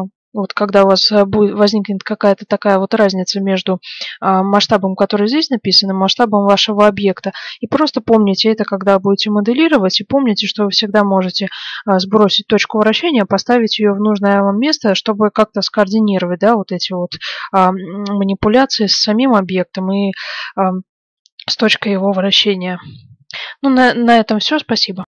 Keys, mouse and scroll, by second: 1.1-2.0 scroll up 1.